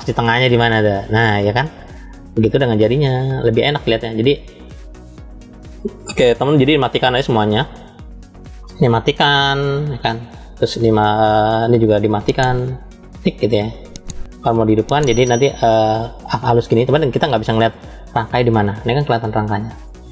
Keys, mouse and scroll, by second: 0.8 middle click, 1.6 shift+middle click, 3.1 middle click, 4.9 click, 7.0 click, 7.9 click, 10.0 click, 12.7 click, 14.9 click, 15.9-16.9 middle drag, 19.0 middle click.